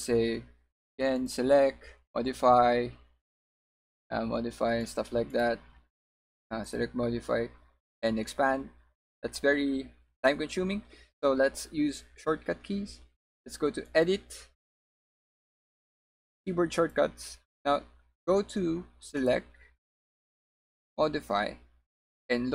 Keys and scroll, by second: 5.2 w.